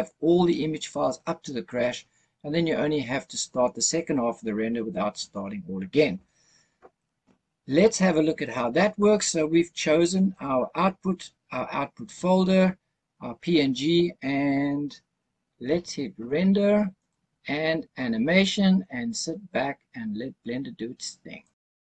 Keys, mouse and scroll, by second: 9.8-10.8 scroll up 6, 10.8-12.9 scroll down 2, 16.9-21.8 drag.